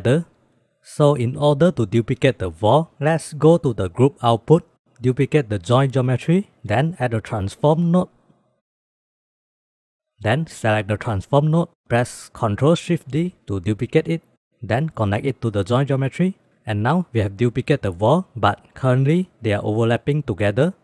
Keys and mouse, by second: 1.7 drag, 2.1 click, 3.4-4.4 drag, 4.8 middle click, 5.4 shift+d, 7.0 shift+a, 10.7-11.6 drag, 12.4 ctrl+shift+d, 15.3-16.5 drag.